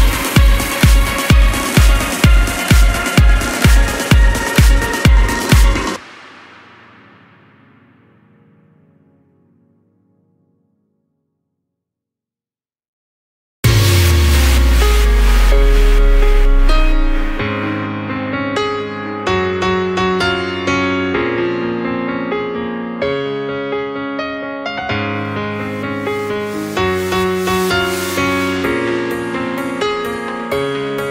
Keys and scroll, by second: 1.3 shift+e, 2.0 l, 5.0 BackSpace, 6.0-6.9 typing, 9.5-10.8 typing, 13.1-16.0 typing, 24.2 ctrl+a.